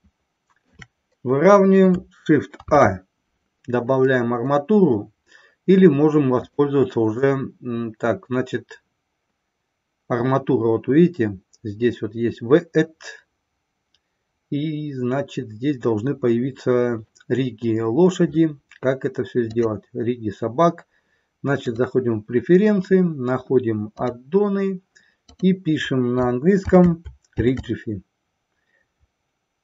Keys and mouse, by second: 2.5 shift+a, 6.3-16.3 drag, 19.5-22.0 drag.